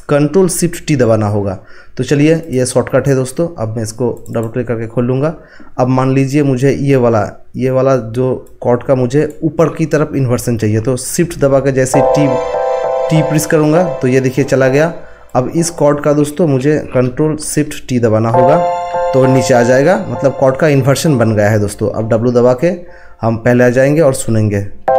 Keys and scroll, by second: 11.9 t.